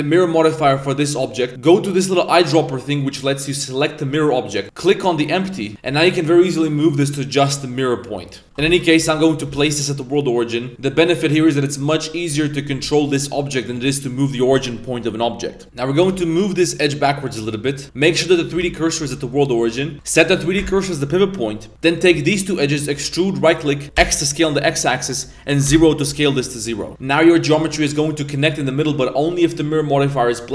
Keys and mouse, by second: 0.6 g, 4.6-5.7 drag, 5.9 g, 8.4-9.5 typing, 10.7 g, 15.6 ctrl+z, 15.6 a, 15.9 g, 17.8 z, 17.8 shift+s, 19.0 shift+s, 20.2 click, 21.7 s, 21.9 right click, 22.2 shift+right click, 23.0 e, 23.8 s, 27.0 Tab, 27.5 1, 28.8 Tab, 29.5-30.4 drag.